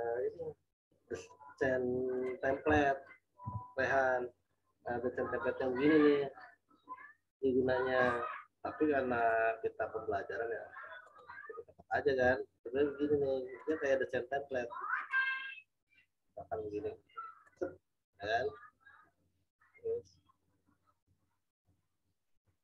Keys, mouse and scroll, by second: 1.1 right click, 2.2 click, 3.4 z, 3.9 click, 9.1 click, 13.6 shift+click, 17.4 shift+click, 21.5 v, 22.4 click.